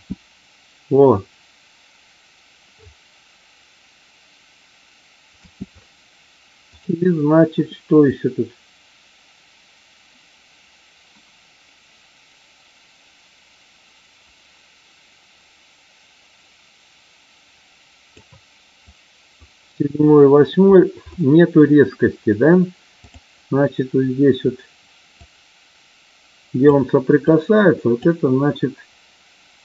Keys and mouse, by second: 5.3 space, 6.7 click, 8.1-18.2 drag, 18.8 click, 22.9 click, 25.2-26.7 drag, 27.2-27.9 drag.